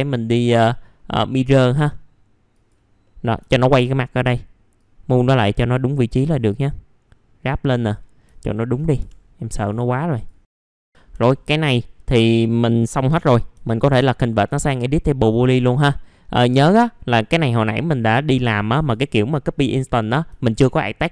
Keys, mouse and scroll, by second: 3.4 alt+middle click, 4.8-8.2 drag, 8.2 scroll down 1, 8.4 alt+middle click, 9.0 F4, 9.2-9.6 scroll down 1, 9.6 click, 10.4-11.1 scroll up 2, 10.5 F4, 10.6 click, 11.1 F4, 11.4 middle click, 12.0 scroll down 1, 14.5 right click, 15.7 click, 17.2 alt+middle click, 17.7 middle click, 18.1 click, 18.8 ctrl+click, 20.4 alt+middle click.